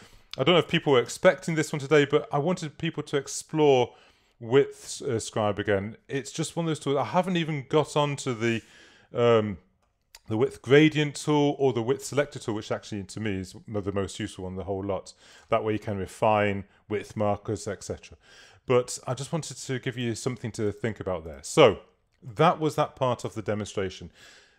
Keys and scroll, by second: 1.2 super+-.